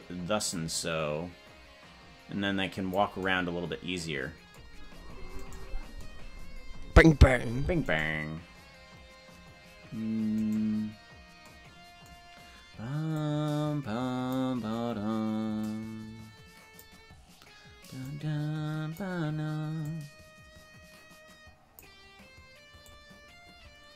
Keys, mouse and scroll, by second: 0.5-3.1 drag, 6.0 right drag, 8.4-10.0 right drag, 11.2 right click, 13.2-14.4 drag, 15.6-16.9 drag, 18.1 click, 19.8-22.0 drag, 22.8-23.9 drag.